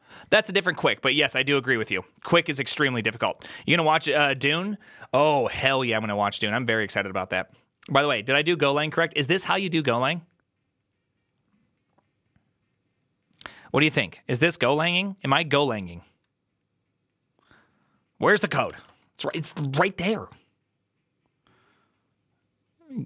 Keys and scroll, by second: 19.2 alt+{.